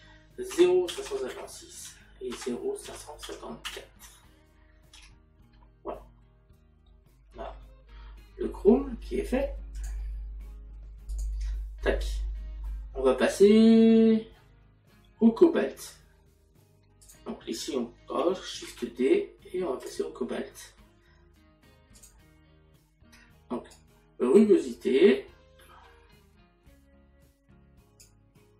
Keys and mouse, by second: 1.9 Tab, 2.3 KP_Decimal, 4.6 KP_4, 6.9 middle click, 9.8 click.